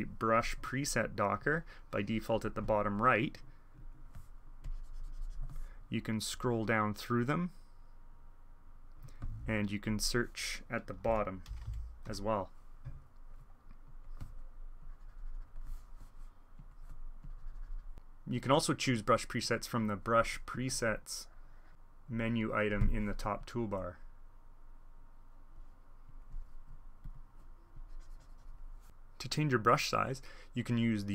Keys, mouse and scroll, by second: 0.6 alt+e, 1.0-5.7 drag, 2.4 alt+e, 7.0-9.4 drag, 9.8-11.0 drag, 10.8-12.6 typing, 13.8-14.6 drag, 14.7-15.8 drag, 16.5 click, 17.2 click, 20.6 alt+e, 20.9-22.8 drag, 22.7 alt+e, 23.3-25.8 drag, 26.0-26.5 drag, 27.0 click, 27.7-28.8 drag.